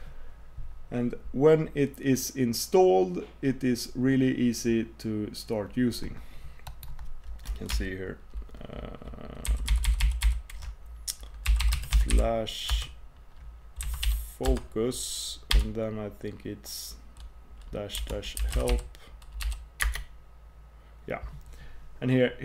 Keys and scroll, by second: 9.5 ctrl+super+k.